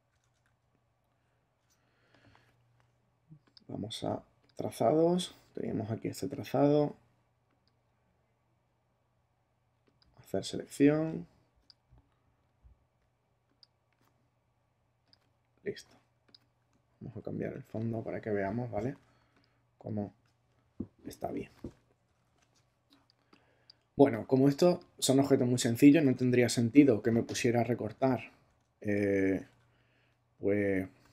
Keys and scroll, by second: 0.2 ctrl+Tab, 1.6 Tab, 17.1 super+i, 22.0 super++, 22.5 super+space, 26.7 super+-, 28.1 Tab, 29.4 super+Tab.